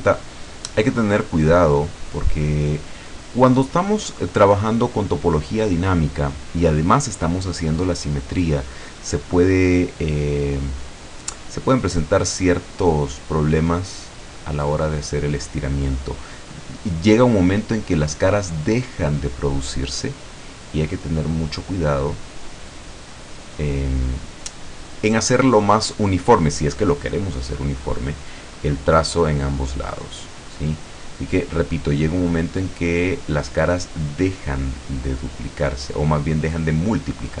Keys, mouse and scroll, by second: 1.0-2.2 drag, 4.4-4.8 scroll down 2, 5.0-5.4 scroll down 2, 6.0-6.4 scroll down 2, 11.8-13.2 drag, 13.7-15.5 drag, 17.0-19.5 drag, 20.3-23.0 drag, 23.6-24.1 scroll down 1, 24.2-25.2 middle drag, 25.3-25.8 scroll up 2, 28.6-30.5 drag, 30.8-32.5 drag, 32.8 scroll down 1, 33.6-35.3 drag, 35.7-37.0 drag.